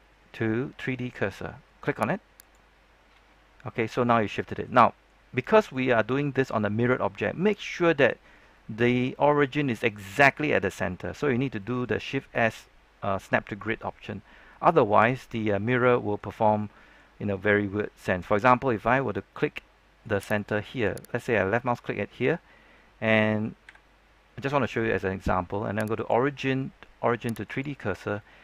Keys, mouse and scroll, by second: 3.9-5.6 middle drag, 6.9 scroll down 1, 7.1-14.9 middle drag, 15.6 scroll down 1, 15.8 middle click, 20.3 click, 21.7 middle click, 23.6 KP_3, 25.9 click, 28.1-28.4 middle drag.